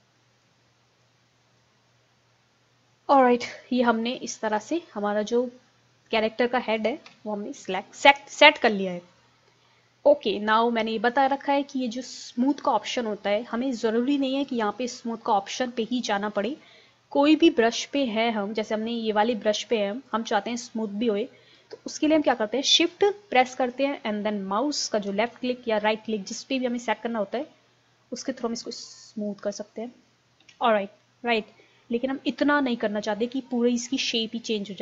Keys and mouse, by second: 1.3 click, 2.1-3.5 middle drag, 3.5 KP_1, 4.3-6.6 middle drag, 7.1 KP_1, 8.7 middle click, 11.3-13.2 drag, 13.5-15.3 drag, 16.0-17.9 drag, 20.1-21.9 drag, 28.3-30.1 drag, 30.4 ctrl+z, 34.2-34.8 drag.